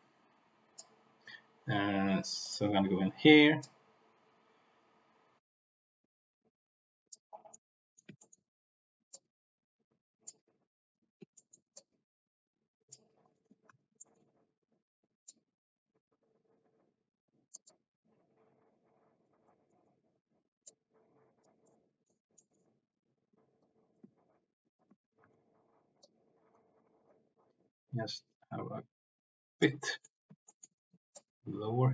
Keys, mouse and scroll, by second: 2.3 click, 3.5-7.1 drag, 7.5 middle click, 8.1 shift+middle click, 9.1-10.2 drag, 11.3 shift+middle click, 11.6-13.0 drag, 13.7 ctrl+z, 13.9 shift+middle click, 15.2-17.6 drag, 18.4 click, 19.7 middle click, 20.6 click, 21.6 middle click, 22.3 middle click, 23.5 click, 25.0 ctrl+z, 25.2 ctrl+z, 26.0 click, 27.0-28.2 middle drag, 28.2-29.6 drag, 29.7 middle click, 30.4 shift+middle click, 31.1 middle click, 31.2 click.